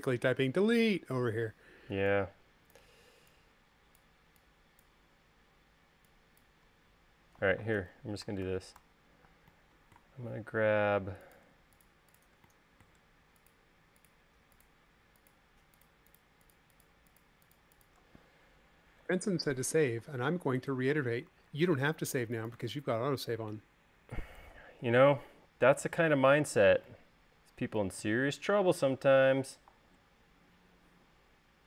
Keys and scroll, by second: 1.2 e, 8.9 super+z, 10.2 space, 20.8 m, 22.3 super+s.